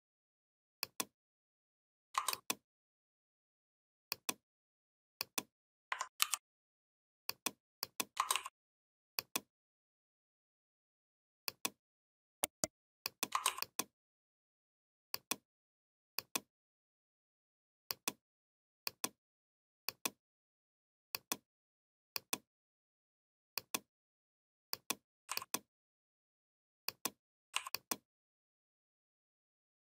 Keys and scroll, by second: 6.0 ctrl+g.